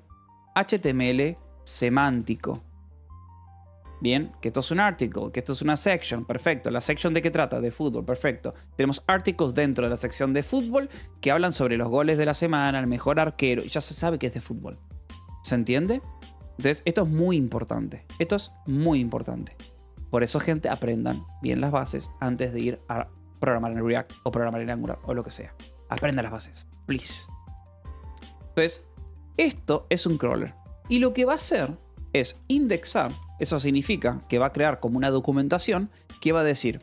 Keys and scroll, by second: 0.0-3.8 typing, 18.4-19.2 typing, 28.7-33.3 typing, 36.7 Escape.